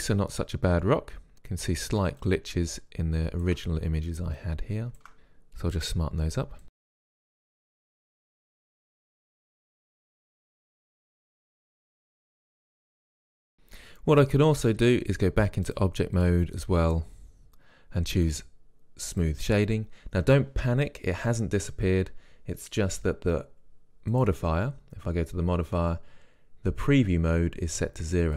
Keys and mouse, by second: 2.5-4.3 drag, 3.9-5.6 middle drag, 4.7 click, 7.3 click, 7.8 middle click, 8.3 click, 8.7 middle click, 9.2 click, 10.0 middle click, 10.3 click, 10.6 middle click, 11.0 middle click, 11.2 click, 12.1-13.3 drag, 13.3-15.2 middle drag, 19.4-21.4 drag, 24.4-26.4 drag.